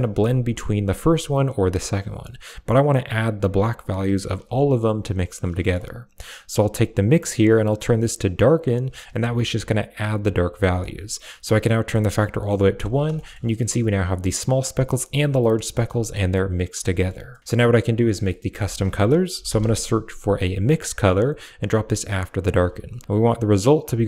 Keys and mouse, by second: 1.3-2.8 drag, 5.5 middle click, 8.3 click, 10.6-12.4 drag, 13.0 shift+middle drag, 15.6 shift+middle click, 16.4 click, 16.8 middle click, 17.2 middle click, 17.5 click, 18.0 middle click, 18.5 shift+a, 21.8 click, 22.1 click, 23.7-24.0 drag.